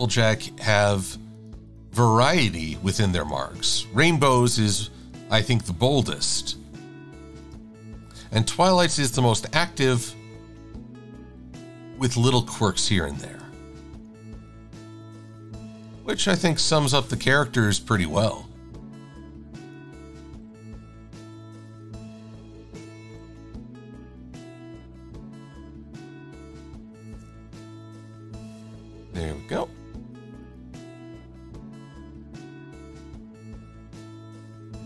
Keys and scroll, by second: 0.1 Left, 1.7 Left, 2.1 Left, 3.2 Left, 3.7 Right, 4.1 Up, 17.5 Up, 18.3 Left, 19.2 Down, 20.2 Left, 22.0 Left, 23.1 Left, 24.0 Right, 25.8 Left, 29.6 Down, 33.6 v.